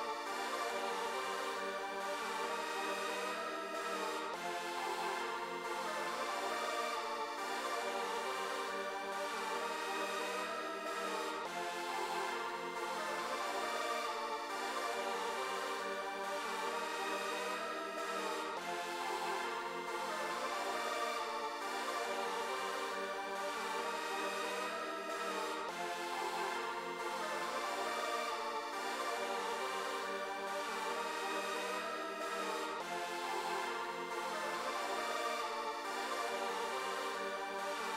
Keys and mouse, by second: 13.4-17.0 drag, 20.5 click, 21.2 click, 22.0 click, 23.3 click, 24.5 click, 25.8 click, 27.3 click, 28.7 click, 30.9 click, 31.3 click, 31.5 click, 31.8 click, 32.0 click, 32.2 click, 33.0 click, 33.3 click, 33.5 click, 33.7 click, 34.0 click, 34.2 click, 35.5 click, 35.7 click, 35.9 click, 36.1 click, 37.8 click.